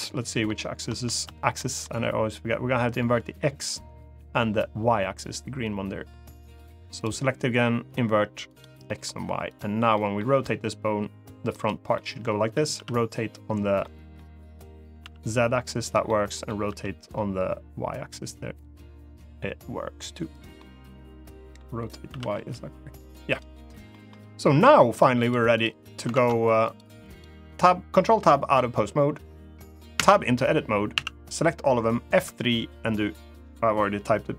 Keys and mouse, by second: 1.1 shift+space, 1.3 middle click, 6.7 click, 8.2 click, 8.6 middle click, 9.7 middle click, 10.0 r, 11.2 right click, 11.7-12.2 middle drag, 12.5 r, 13.5 middle click, 14.7 z, 15.5 right click, 15.8 middle click, 16.4 r, 20.0 right click, 20.3-21.3 middle drag, 21.8 r, 22.1 y, 23.0 right click, 23.6 middle drag, 24.9 click, 25.3 click, 25.9 ctrl+Tab, 26.4 click, 26.9-29.0 drag, 29.7 Tab, 30.7 a, 31.9 F3.